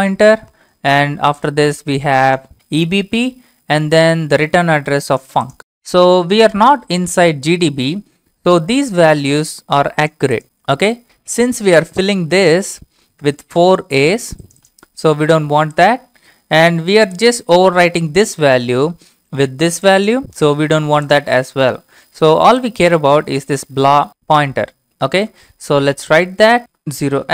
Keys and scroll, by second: 13.4 alt+Tab, 18.9 alt+Tab, 25.3 alt+Tab, 27.0-27.3 typing.